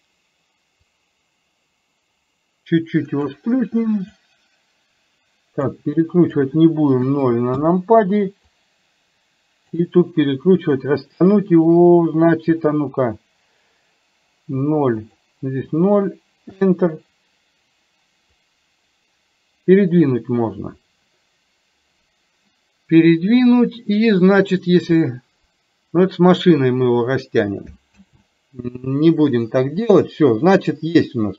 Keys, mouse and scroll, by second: 0.9-3.3 drag, 4.2-5.7 drag, 6.3-7.8 drag, 8.5-14.5 drag, 14.5 KP_0, 15.0-16.7 drag, 18.3-26.5 drag, 30.8-31.3 middle drag.